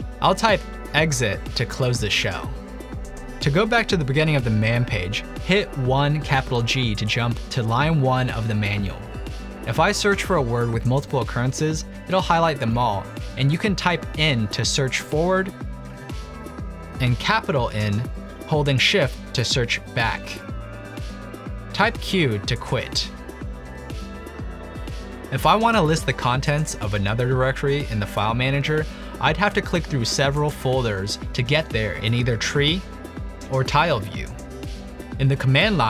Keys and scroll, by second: 0.6-1.7 typing, 6.3-7.1 typing, 11.9-13.4 typing, 16.6-17.3 typing, 18.3 typing, 19.3 typing, 21.6 q, 23.6 ctrl+l.